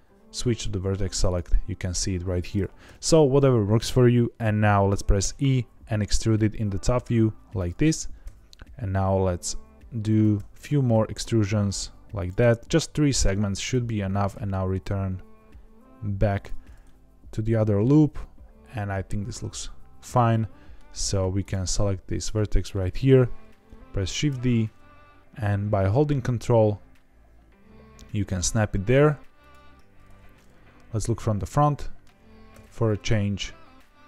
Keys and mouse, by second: 1.2 click, 2.8 KP_7, 5.2 e, 7.5 click, 10.0 click, 10.3 e, 12.1 click, 12.3 e, 13.5 click, 14.3 e, 16.3 click, 16.8-20.7 middle drag, 21.3 click, 22.6 middle click, 24.2 shift+d, 29.3 ctrl+click, 30.5 KP_1, 31.7 shift+middle click, 32.5 e.